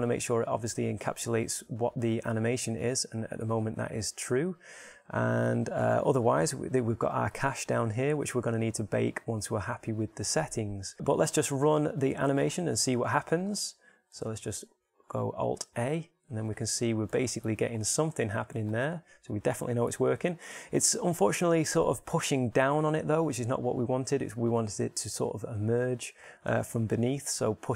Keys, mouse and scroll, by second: 10.5-12.3 middle drag, 13.3-15.9 drag, 14.7 alt+a, 18.5 alt+a.